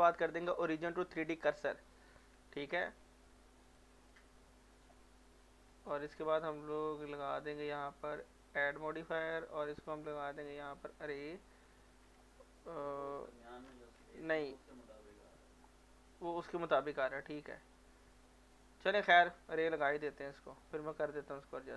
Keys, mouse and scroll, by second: 1.2 click, 2.1 middle click, 3.6 click, 5.1 middle click, 5.7 scroll up 1, 8.5 click, 11.1 click, 12.6 middle click, 13.8 ctrl+z, 14.2 click, 17.2-20.1 middle drag, 20.1 click.